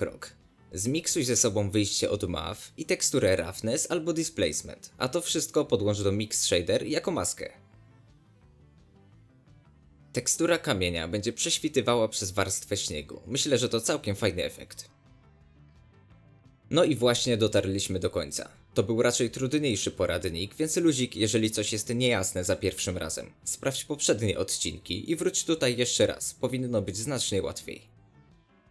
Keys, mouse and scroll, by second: 1.3 click, 2.5 click, 3.6 ctrl+shift+click, 5.2-6.8 drag, 7.6-8.9 drag, 8.9 middle click, 9.6 click, 10.5 ctrl+shift+click, 11.2-12.4 shift+middle drag, 12.4 click, 13.0 click, 13.9 shift+middle click, 14.1 scroll up 1, 14.6-14.9 scroll down 1, 14.9-16.0 drag, 16.0 scroll down 1, 16.1 shift+middle drag, 16.3 scroll up 1, 16.4-16.9 shift+middle drag, 16.9 scroll down 1, 17.0-20.0 shift+middle drag, 20.0-21.2 shift+drag, 21.2 scroll down 1, 21.3 shift+middle click, 22.1-23.5 shift+drag, 24.1 scroll down 1, 24.2-28.7 middle drag.